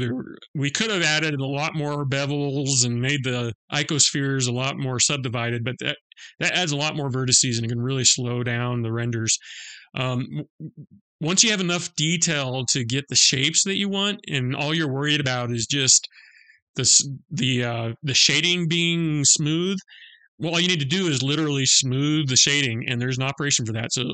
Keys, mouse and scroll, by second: 22.6 click.